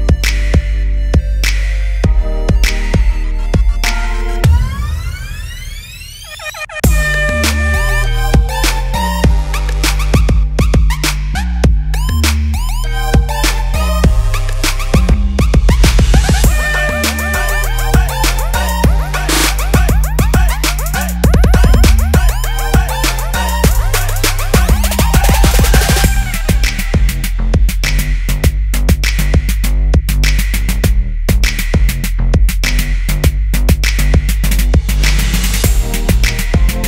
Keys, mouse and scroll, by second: 1.1 right click, 5.3 click, 11.2 click, 11.7 right click, 14.3 click, 16.5-16.8 scroll up 1, 16.8-18.6 scroll down 1, 19.0 right click, 20.6 click, 21.8 shift+d, 25.2 ctrl+d, 26.6-28.7 scroll up 1, 28.7 click, 32.9-33.7 scroll down 1, 34.0 shift+click.